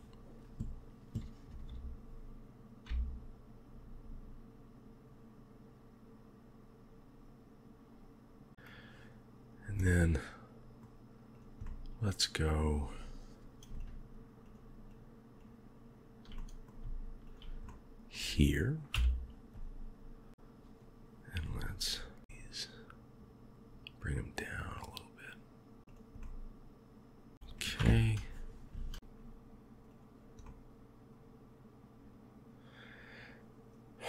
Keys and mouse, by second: 1.5 g, 8.5 KP_1, 9.7-10.7 middle drag, 11.5 middle click, 13.7 shift+click, 14.3 shift+click, 14.8 shift+click, 16.2 middle click, 17.1 shift+click, 17.6 middle click, 18.8 KP_1, 22.2 g, 26.1-27.3 middle drag, 27.7 KP_3, 30.3-34.0 middle drag.